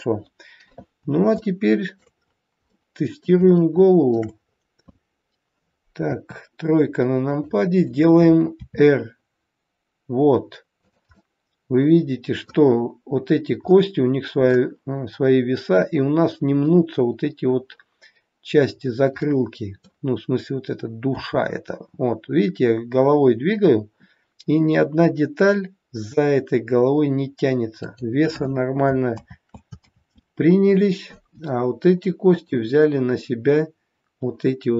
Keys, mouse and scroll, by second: 1.4 shift+middle click, 2.2 scroll up 3, 2.7 middle click, 3.5 shift+middle click, 4.4-5.1 scroll up 2, 6.0 KP_3, 7.2 click, 8.6 r, 11.1 middle click, 15.2-16.6 scroll up 1, 16.6 scroll up 2, 18.6-19.1 scroll down 2, 19.1 middle click, 21.0 r, 29.7 ctrl+z, 32.2 click.